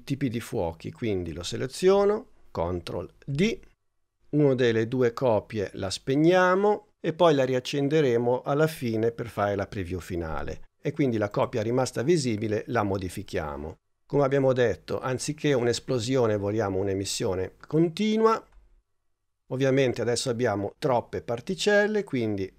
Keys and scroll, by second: 3.3 super+d.